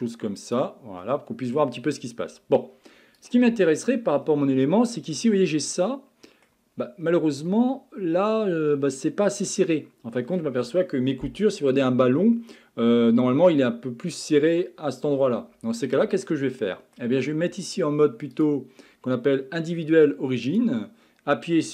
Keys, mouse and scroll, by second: 0.5 click, 1.0-1.8 middle drag, 1.8-2.2 scroll down 5, 2.2 scroll up 6, 3.2 click, 3.7 Tab, 4.2-4.7 scroll down 1, 4.7-6.7 middle drag, 6.7-7.5 scroll up 4, 7.5-9.3 middle drag, 9.3-11.4 scroll up 5, 15.8-16.6 scroll down 6, 16.6 middle click, 17.0 scroll up 1, 18.3-21.4 drag.